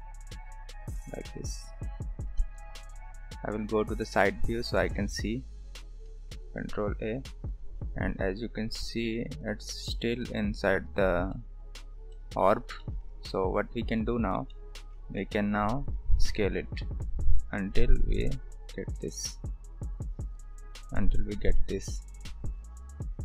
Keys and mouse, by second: 2.4 KP_3, 4.6 s, 6.1 ctrl+a, 11.3 middle click, 12.1 shift+middle click, 12.8 shift+middle click, 13.1 Tab, 14.0-14.3 drag, 14.5 shift+middle drag, 15.3-15.7 middle drag, 15.9 s, 18.9 KP_3, 23.0 s.